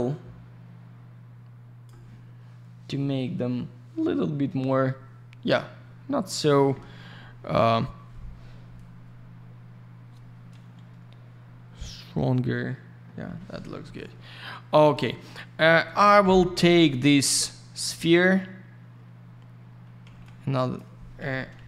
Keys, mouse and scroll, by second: 2.8 scroll up 1, 4.1-4.6 scroll down 1, 14.8 click, 14.9 click, 16.2 F4, 16.6 click, 16.6 click, 16.8 click, 16.9 click, 17.8 й, 17.9 click, 18.1 click, 20.0 alt+я, 20.2 click.